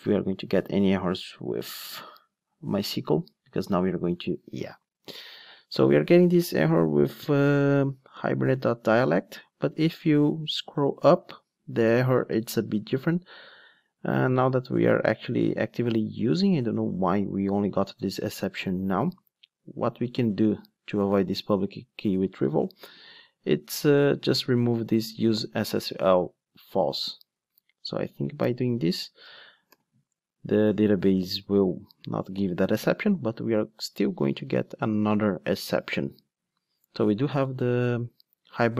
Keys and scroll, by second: 25.5 super+x, 29.7 ctrl+d.